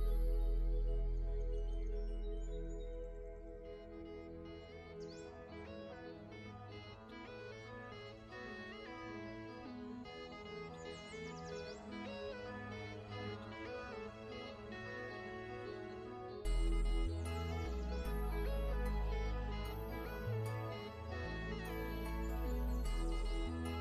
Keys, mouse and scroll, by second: 0.0 click, 0.7 click, 1.7 click, 3.3 click, 4.5 shift+click, 4.8-5.2 alt+scroll down 2, 5.2 v, 5.3 click, 7.4 m, 7.5 click, 8.0 v, 8.1 click, 10.2 i, 10.3 click, 10.6 v, 10.7 click, 11.4 alt+scroll up 1, 12.0 click, 12.7 g, 13.0 click, 13.9 v, 14.3 click, 14.6-15.0 alt+scroll down 2, 15.1 scroll up 1, 16.2 click, 17.7-23.0 typing, 17.8 click, 18.5 ctrl+z, 19.0 click, 20.1 shift+click, 20.7 click, 23.3 shift+click.